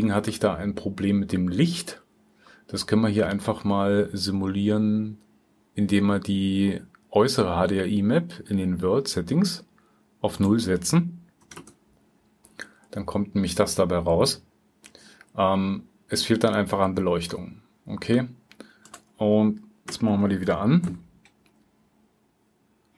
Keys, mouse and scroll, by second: 0.4-0.9 drag, 1.7-2.0 drag, 2.4-11.4 drag, 13.8 click.